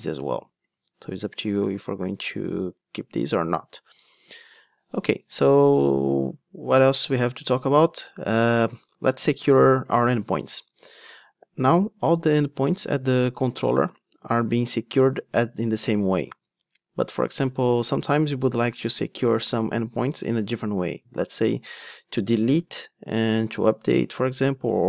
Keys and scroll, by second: 10.2 ctrl+Tab.